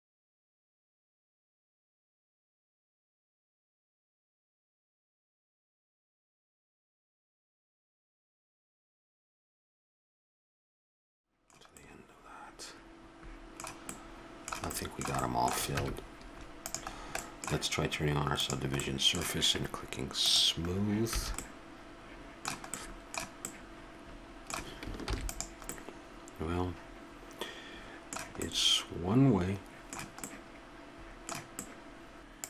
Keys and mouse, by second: 0.1 click, 0.1 a, 0.6 click, 0.8 ctrl+f, 1.1 a, 2.1 click, 2.4 ctrl+f, 2.6 click, 2.7 a, 3.1 click, 3.3 ctrl+f, 3.6 a, 4.4 click, 4.6 ctrl+f, 4.8 a, 5.6 click, 5.8 ctrl+f, 6.0 a, 6.9 click, 7.0 middle click, 7.1 ctrl+f, 7.1 click, 7.3 a, 8.2 click, 8.3 ctrl+f, 8.8 a, 9.0 right click, 9.1 click, 9.3 ctrl+f, 9.6 a, 10.0 click, 10.2 ctrl+f, 10.4 a, 16.1 Tab, 18.7-20.4 drag, 20.6-22.3 drag, 21.5 a, 22.3-22.7 middle drag, 25.3 ctrl+s.